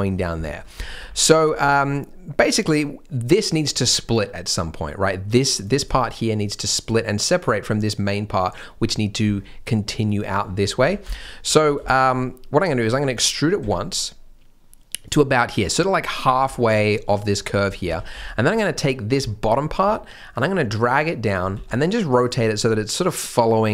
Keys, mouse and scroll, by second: 0.4 shift+m, 0.7 alt+a, 0.9 b, 1.7 shift+m, 2.5-3.1 scroll up 1, 5.3 click, 9.3 scroll down 1, 10.4-10.7 scroll up 1, 10.8 alt+a, 11.0 b, 11.6 scroll up 1, 11.8 shift+m, 13.6 e, 16.2 scroll down 1, 16.5 shift+m, 17.3-17.7 scroll up 1, 17.9 alt+a, 18.1 b, 19.2 shift+m, 19.8 g, 21.5 r.